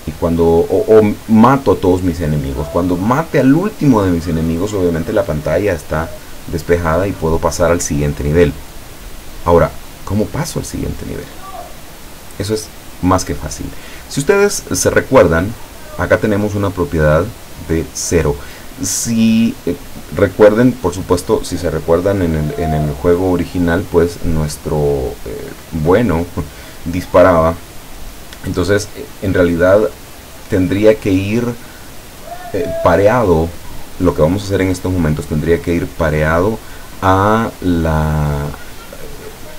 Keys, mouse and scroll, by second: 0.5-1.4 middle drag, 15.5-16.2 middle drag, 16.7 click, 25.4 right click.